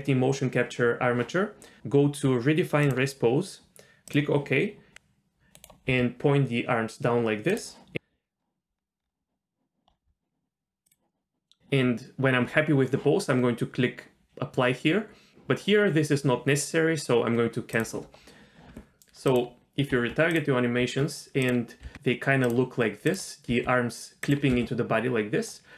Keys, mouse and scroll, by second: 2.8-4.2 drag, 4.9 click, 4.9 r, 5.4 click, 5.9 r, 7.9-9.0 scroll down 7, 9.0-9.9 scroll up 1, 9.9-10.2 scroll up 4, 11.2 click, 11.2-11.6 scroll up 1, 17.7 click, 19.3 click, 19.9 Tab, 20.3 click, 20.8 Tab, 21.4 click, 21.9 r, 23.1 click, 23.5 r, 24.5 z.